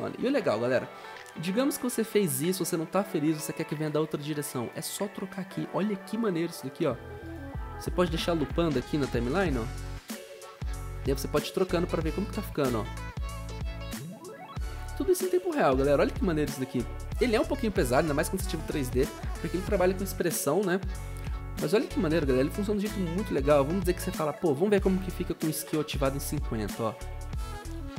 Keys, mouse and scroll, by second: 3.8 typing, 9.6-10.3 typing, 25.0-25.9 typing.